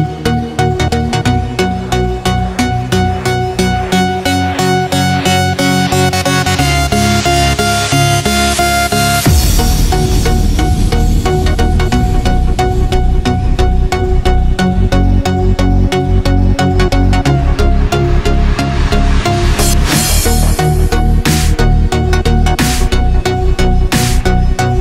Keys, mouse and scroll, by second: 0.2 ctrl+s, 3.4 click, 11.6 ctrl+c, 12.4 click, 13.7 ctrl+v, 15.0 click, 20.4 click, 21.5 click.